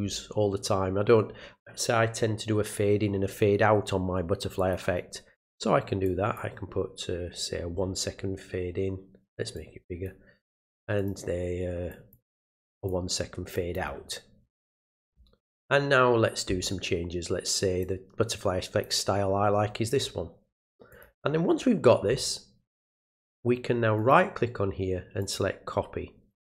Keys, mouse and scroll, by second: 4.6 click, 6.0 click, 9.6 click, 11.0 click, 11.9 click, 12.8 click, 13.5 click, 15.4 click, 17.8-18.8 drag, 20.9 click, 24.0 right click, 25.2 click.